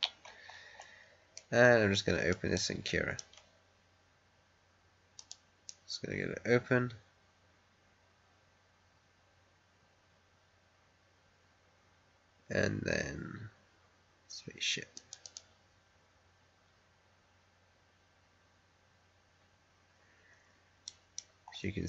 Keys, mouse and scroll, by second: 0.1-1.3 scroll down 1, 1.3 middle click, 2.5-5.1 right drag, 5.1 click, 14.9 click, 19.9-20.3 scroll up 1, 20.8 right click, 21.3 scroll up 1.